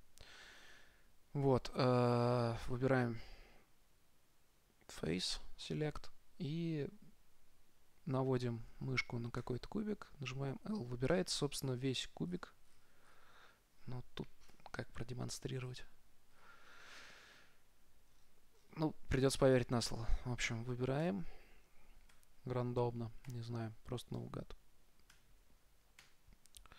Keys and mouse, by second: 9.7 l, 11.5 middle click, 12.3 middle click, 14.8 middle click, 14.8 KP_0, 15.2-16.2 middle drag, 16.8-20.8 middle drag, 21.3 l, 22.4 l, 23.6-26.7 typing.